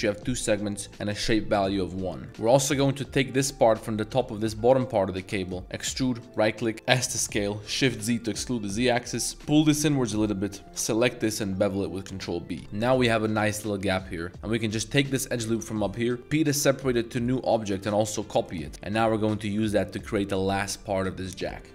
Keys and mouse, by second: 2.3 Tab, 2.5 middle click, 3.2 middle click, 3.5 Tab, 4.0 1, 4.3 alt+click, 4.6 z, 5.8 e, 6.7 s, 7.8 shift+z, 10.2 click, 11.3 ctrl+b, 12.6 middle click, 12.6 a, 13.2 click, 14.3 1, 15.0 click, 16.0 middle click, 16.2 p, 17.7 Tab, 17.9 click, 18.5 click.